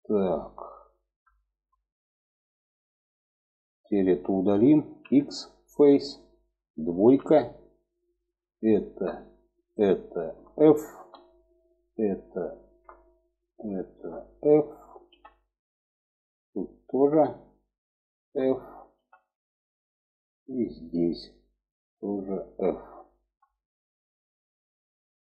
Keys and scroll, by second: 4.3 x, 6.4 2, 10.3 f, 14.4 f, 18.3 f, 22.6 f.